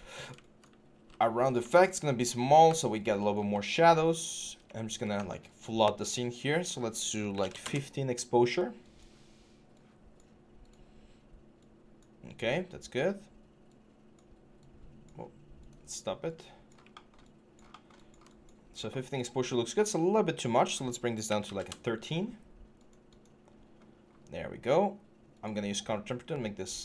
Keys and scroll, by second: 0.7 w, 3.1 typing, 4.9 w, 6.1-7.2 typing, 7.4 Return, 21.3 typing.